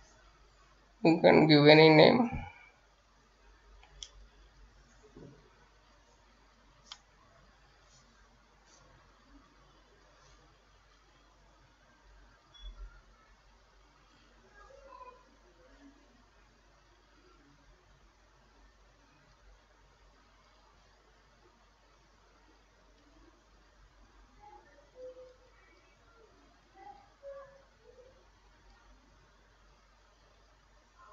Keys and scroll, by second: 3.6-6.6 typing.